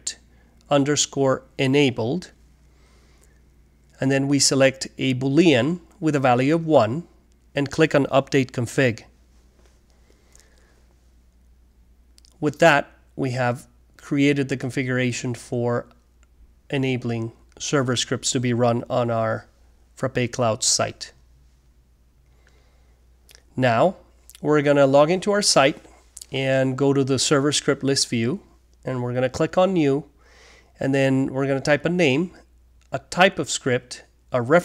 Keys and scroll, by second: 0.0-0.6 typing, 1.7-3.8 typing.